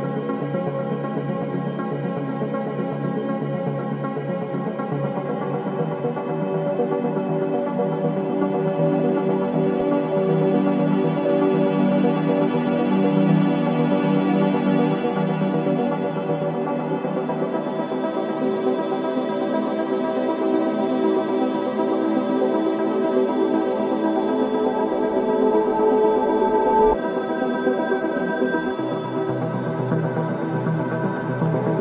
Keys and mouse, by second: 7.0 shift+d, 7.9 r, 11.9 click, 14.0 s, 16.1 shift+d, 19.6 shift+d, 27.4 shift+d, 28.5 r.